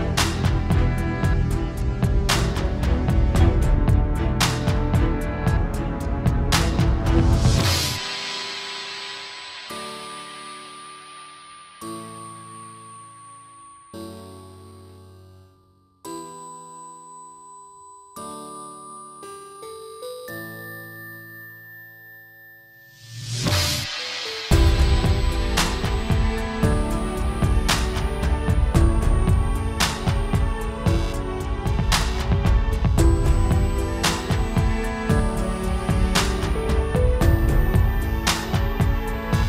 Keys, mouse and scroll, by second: 3.2-3.7 scroll down 7, 3.5-4.0 scroll up 4, 3.8 shift+middle click, 4.3 scroll down 1, 4.4-5.3 scroll down 7, 4.4 x, 4.9 middle click, 5.2 shift+middle click, 5.6 click, 5.6 scroll up 1, 6.9 click, 9.3 middle click, 9.6 KP_Decimal, 9.9-10.2 scroll up 7, 10.1 middle click, 10.4 scroll down 6, 10.5 scroll up 2, 10.6 middle click, 10.7 scroll down 1, 10.8 shift+middle click, 11.1 middle click, 11.1 scroll up 1, 11.3 scroll down 5, 11.5 shift+middle click, 11.6 scroll up 2, 11.7 middle click, 11.9-12.2 scroll down 2, 12.1 click, 12.2 scroll up 1, 12.3 middle click, 12.5 click, 12.6-13.0 scroll down 3, 12.7 middle click, 13.0 click, 13.2 scroll up 2, 13.3 click, 13.4-14.1 scroll down 10, 13.8 middle click, 14.4 alt+g, 14.8 scroll down 1, 15.0 s, 15.8 scroll up 1, 16.1 r, 17.0 click, 17.8 KP_Decimal, 18.0 scroll up 2, 18.1 middle click, 18.5 click, 20.8 click, 21.4-22.0 scroll down 3, 21.6 click, 22.7 click, 22.7 s, 23.3 click, 24.0 scroll up 2, 24.1 middle click, 24.5 scroll down 1, 24.6 middle click, 24.9 r, 27.5 click, 28.8 click, 28.8 scroll up 1, 29.1 KP_Decimal, 29.3 middle click, 29.5 scroll up 3, 29.6 shift+middle click, 30.0 r, 30.7 r, 31.4 click, 31.7 scroll down 3, 31.8 shift+middle click, 31.9 scroll up 3, 32.0 middle click, 32.2 scroll down 1, 32.3 middle click, 32.5 click, 33.1 r, 33.6 r, 35.7 scroll up 1, 35.8 shift+middle click, 36.0 middle click, 36.3 scroll up 2, 36.5 click.